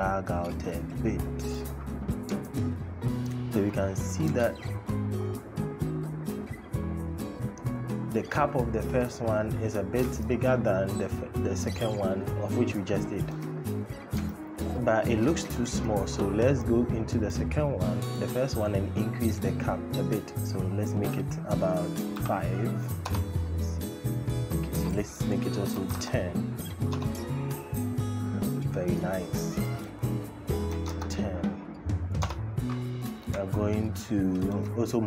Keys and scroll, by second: 22.0 KP_5, 22.8 Return, 25.6 KP_1, 25.7 KP_0, 26.6 Return, 30.5 KP_1, 30.6 KP_0, 31.9 Return.